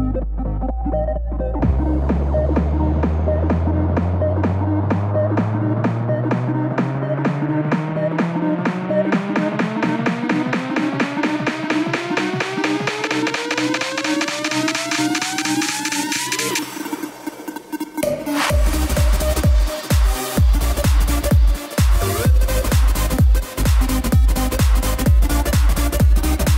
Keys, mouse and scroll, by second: 19.8 click, 23.2-24.4 drag, 26.0 r.